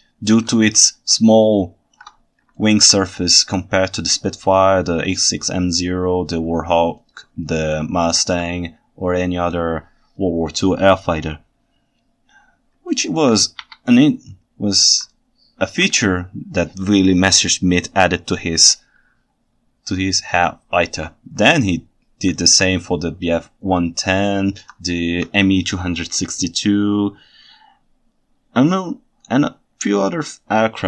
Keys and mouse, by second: 1.3-2.0 ctrl+shift+middle drag, 2.6 ctrl+alt+right drag, 2.7 ctrl+alt+middle drag, 2.8 ctrl+alt+right click, 7.1 ctrl+alt+right drag, 7.2 ctrl+alt+click, 7.3-7.6 ctrl+alt+right drag, 7.6 ctrl+alt+drag, 7.8 ctrl+alt+right click, 7.9 ctrl+alt+click, 8.0 ctrl+alt+right click, 13.1 ctrl+alt+right click, 13.2 ctrl+alt+click, 13.6 KP_1, 15.1 ctrl+alt+drag, 15.2-15.8 ctrl+alt+right drag, 20.1 ctrl+alt+right drag, 21.5-22.4 ctrl+alt+right drag, 24.3-24.7 ctrl+alt+right drag, 24.7 ctrl+middle click.